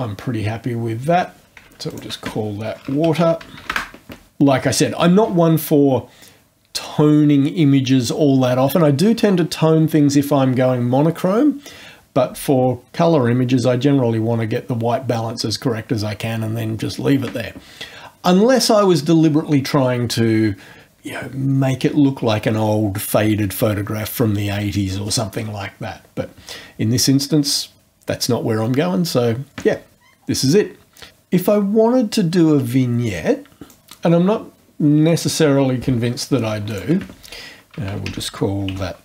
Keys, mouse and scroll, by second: 1.9 ctrl+click, 2.6-4.0 typing, 33.7 click, 36.6 ctrl+click, 37.5-39.0 typing.